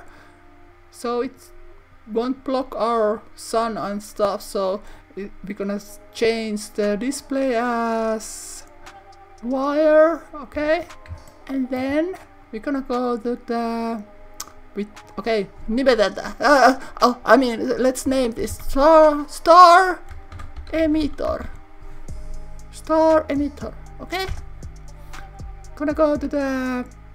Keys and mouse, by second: 1.4 click, 8.1-9.6 drag, 15.0-25.1 drag, 25.9 click.